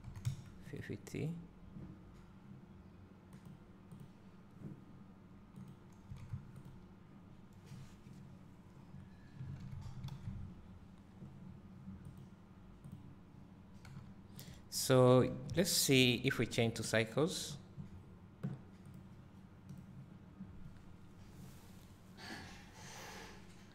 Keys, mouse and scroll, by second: 0.9 click, 4.0 click, 6.8 click, 7.7 scroll up 1, 8.6-8.9 scroll down 1, 10.2 alt+a, 11.1 scroll down 1, 12.3 click, 13.1 click, 14.1 g, 14.6 click, 20.5 click.